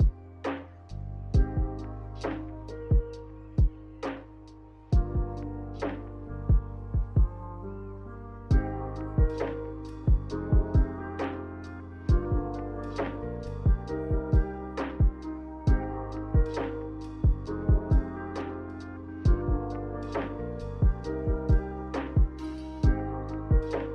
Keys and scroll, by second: 12.0 Delete, 13.2 m, 16.1 m, 22.9 b.